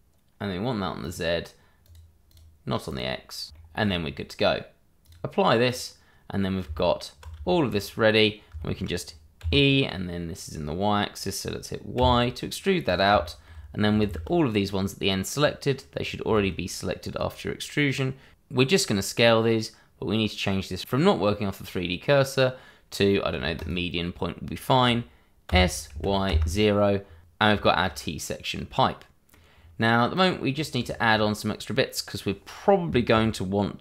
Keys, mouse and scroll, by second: 2.3 double click, 4.3 shift+middle click, 5.0 click, 6.6 Tab, 7.4 shift+middle click, 8.0-8.5 scroll up 1, 8.6 shift+middle click, 9.4 e, 11.9 y, 12.8 click, 13.2 middle click, 13.7 shift+middle click, 13.7 scroll down 1, 15.3 shift+z, 15.3-15.8 scroll up 1, 16.2 shift+z, 23.5 click, 25.4 s, 25.9 y, 26.2 KP_0, 27.2 click, 27.5 scroll down 1, 27.7 Tab, 28.8 middle click, 30.1 click, 30.5-30.8 scroll up 1, 30.8 shift+middle click.